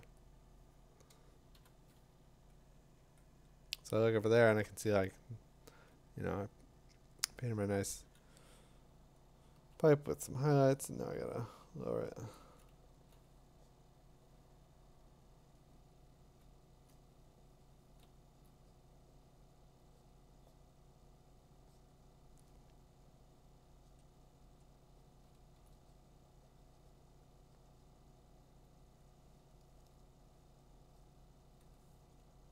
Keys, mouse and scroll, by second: 0.4 click, 1.5 b, 4.3 b, 7.4 click, 8.0 [, 9.5 [, 11.4 [, 12.1 [, 12.4 [, 16.6 click, 16.9 click, 18.4 click, 25.7 click, 32.3 click.